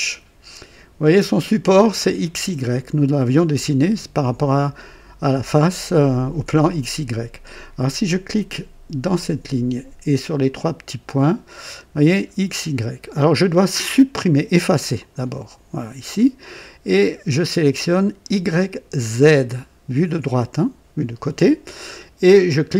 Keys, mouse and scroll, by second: 9.1 click, 10.4 click, 14.9 click, 19.2 click.